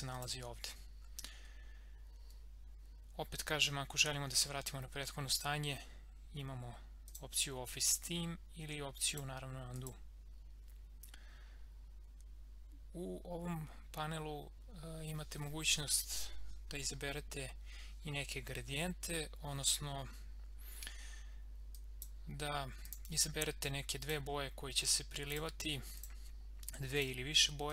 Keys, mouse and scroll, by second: 0.1 click, 7.0 click, 16.1 click, 21.7-27.7 drag.